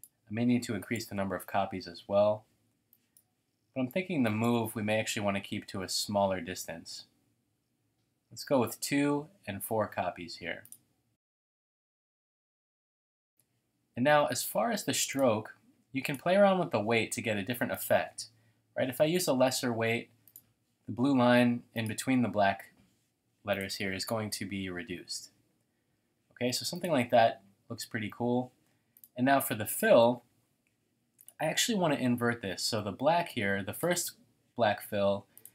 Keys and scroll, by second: 1.0 Tab, 2.5 typing, 3.9 typing, 5.2-5.5 typing.